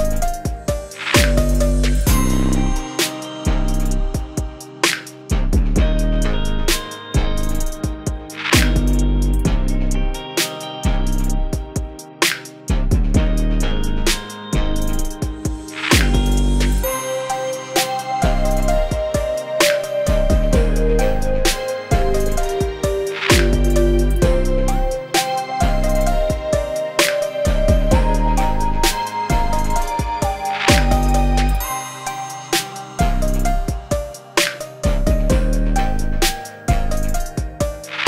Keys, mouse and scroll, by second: 0.4 click, 0.4 v, 0.9 click, 1.7 click, 2.7 scroll up 1, 2.8 space, 2.8 click, 2.9 space, 3.2-3.8 click, 4.0 g, 4.1-4.5 click, 4.6 click, 4.9 space, 5.0 click, 5.0 space, 5.3 click, 5.4-5.7 shift+click, 5.7 click, 5.8 shift+click, 6.1 click, 6.2 shift+click, 6.4-6.8 click, 6.9 space, 7.2 click, 7.3 space, 7.4 click, 7.5 space, 8.0 shift+click, 8.5 shift+click, 9.0 scroll down 1, 9.1 space, 9.1 click, 9.5-10.5 click, 10.6 click, 10.9 shift+click, 11.0 click, 11.3 shift+scroll up 1, 11.6-13.3 drag, 13.2 space, 13.7 click, 13.9 space, 14.5-14.9 click, 15.2 ctrl+d, 15.5 v, 15.6-16.2 click, 16.2 g, 16.4-17.2 click, 17.3 scroll up 1, 17.3 space, 17.5 space, 17.5 ctrl+z, 17.8 click, 18.1 space, 18.2 click, 18.2 scroll down 1, 18.3 v, 18.5-18.8 click, 19.4 drag, 20.7-21.2 scroll up 1, 21.2 space, 21.2 click, 21.6 g, 21.7-22.2 click, 22.2 shift+click, 22.3 click, 23.0 click, 23.7 click, 23.9 scroll down 1, 24.0 space, 24.5 click, 24.7 scroll down 1, 24.7 space, 25.4 click, 25.6 space, 26.3-28.0 drag, 28.1 scroll up 1, 28.1 space, 28.2 click, 28.3 space, 28.6 click, 29.3 Return, 29.4 Right, 30.1 shift+t, 30.2 Right, 30.3 Return, 30.5 ctrl+Up, 30.6 Return, 30.7 Right, 31.0 2, 31.1 ctrl+Left, 31.2 Right, 31.4 shift+t, 31.4 shift+Return, 31.6 ctrl+s, 32.0 click, 32.1 ctrl+d, 32.2-32.5 click, 32.8 v, 33.0-33.4 click, 33.7 g, 34.0 click, 34.4 v, 34.9-36.1 click, 36.3 click, 36.6 g, 36.7-37.1 click, 37.6-38.0 drag.